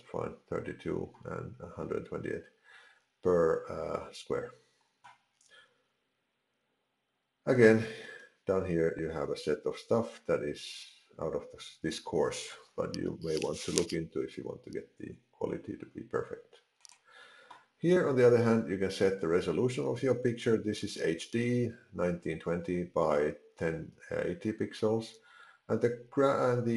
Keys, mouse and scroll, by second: 0.0 ctrl+z, 7.6-9.8 scroll down 20, 9.9-10.3 scroll up 1, 16.8 click.